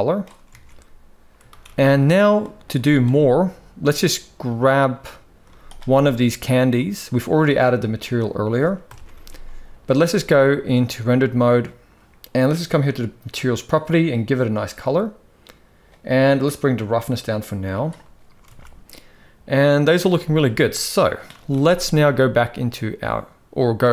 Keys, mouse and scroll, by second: 0.1 alt+a, 1.2 ctrl+s, 1.6 ctrl+s, 2.1 middle drag, 2.5 z, 4.2-5.1 drag, 5.1 z, 6.3-7.3 drag, 8.5 KP_0, 8.8 ctrl+s, 9.8 z, 13.0 click, 16.5-17.7 drag, 18.1 alt+a, 19.8 z, 22.8 ctrl+s.